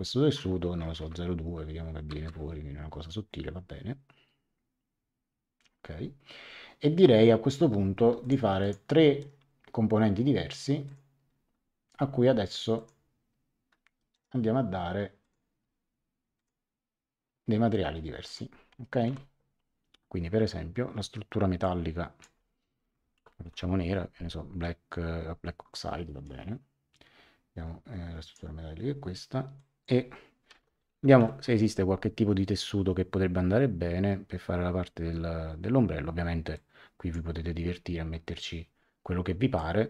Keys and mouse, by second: 0.7 KP_0, 0.8 KP_Decimal, 0.9 ., 1.0 KP_2, 2.1 Return, 8.2 click, 9.1 right click, 10.8 click, 12.7 click, 14.1 right click, 15.2 click, 16.3 click, 18.2 click, 19.0 a, 21.6 click, 22.7-24.0 typing, 25.7 click, 29.5 click, 30.2-31.6 typing, 36.5 click, 39.5 click.